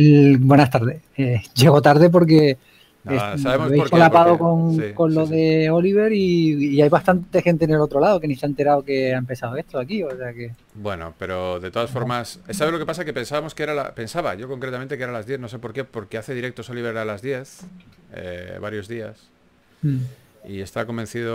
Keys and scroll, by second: 11.1-12.7 typing, 14.1-14.5 typing, 19.9 typing.